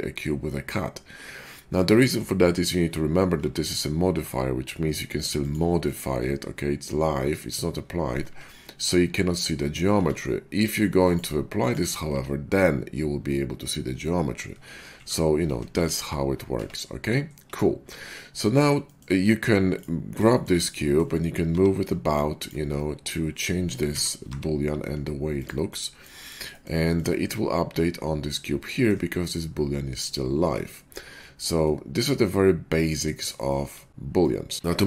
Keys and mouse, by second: 3.4 Tab, 5.3 click, 5.8 click, 6.4-10.9 drag, 8.2 Tab, 9.9 Tab, 12.0 Tab, 14.4-16.2 ctrl+drag, 14.9 ctrl+a, 15.4 ctrl+z, 15.6 ctrl+z, 15.9 ctrl+z, 16.5 Tab, 17.7 /, 19.7-26.8 drag, 21.4 g, 23.9 s, 27.5 /, 30.7 /, 31.0-33.6 middle drag, 33.6-34.0 shift+drag, 34.0-34.8 middle drag.